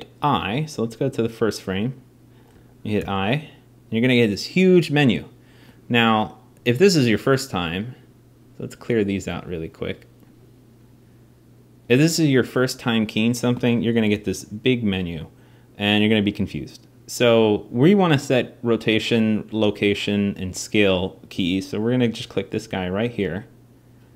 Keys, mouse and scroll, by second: 10.3-22.7 right drag.